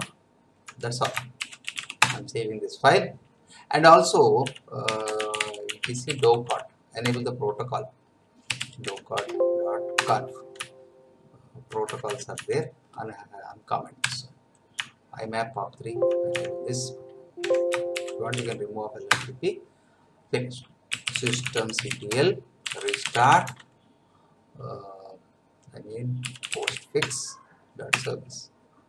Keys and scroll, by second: 0.1 Down, 1.0 Escape, 1.1-2.3 typing, 4.2-7.0 typing, 7.0 Tab, 8.5 d, 8.8 v, 9.1 Tab, 10.0 Return, 10.6 Down, 14.0 Delete, 14.8 Right, 17.4 Escape, 17.7-18.8 typing, 19.1 Return, 20.7-23.8 typing, 26.0-27.1 typing, 27.9 Return.